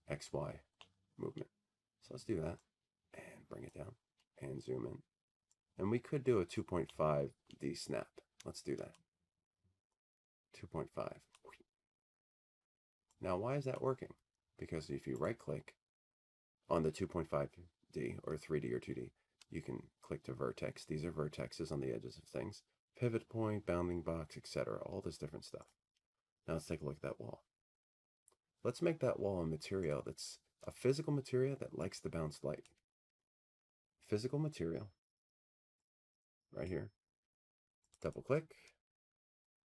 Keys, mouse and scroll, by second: 0.9 click, 1.1-2.6 scroll, 5.1 click, 5.5-6.9 scroll, 6.9-7.3 scroll, 9.4 click, 9.5 middle click, 13.1 middle click, 13.1 click, 14.6 click, 16.9 click, 19.4 click, 20.9 right click, 31.3 click, 35.6-37.7 drag, 38.3 click.